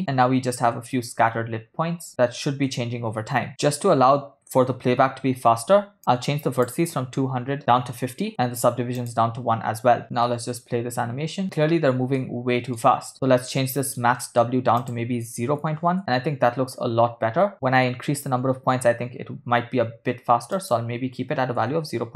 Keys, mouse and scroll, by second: 1.9 space, 3.2 space, 3.5 scroll up 3, 6.0-8.3 shift+drag, 9.0 click, 10.5 space, 12.3 middle click, 13.1 ctrl+space, 13.2 ctrl+middle click, 13.8 middle click, 14.2 ctrl+middle click, 14.8-16.0 drag, 16.0 space, 20.2 space, 20.5-22.1 drag.